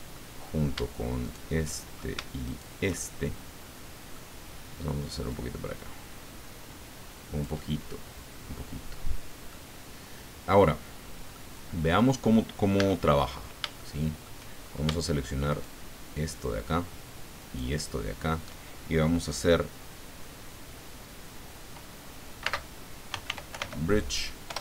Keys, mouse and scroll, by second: 1.2 shift+right click, 1.7 shift+right click, 2.5 shift+right click, 2.9-4.3 shift+middle drag, 5.3-9.6 drag, 11.0 scroll down 2, 11.3 click, 12.7 a, 13.3-13.6 scroll up 1, 13.8 shift+click, 15.5 alt+shift+right click, 17.4 alt+shift+right click, 22.4-23.5 typing, 24.5 Return.